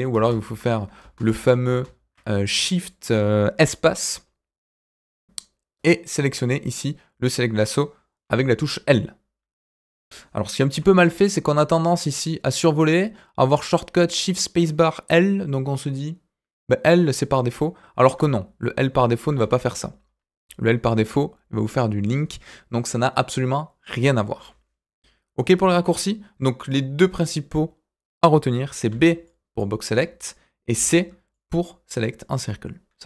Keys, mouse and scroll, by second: 1.0 ctrl+space, 8.9 click, 10.8 ctrl+z, 18.1 w, 19.3 w, 20.8 l, 28.9 b, 29.9 Escape, 30.7 c.